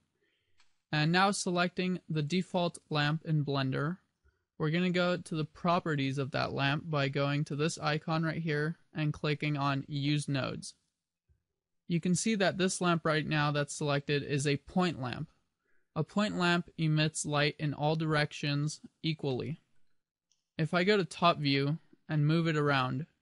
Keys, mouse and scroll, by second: 0.6 middle click, 0.8 middle click, 2.2 right click, 7.6 click, 10.2 click, 19.4 middle click, 20.9 KP_7, 22.5 g.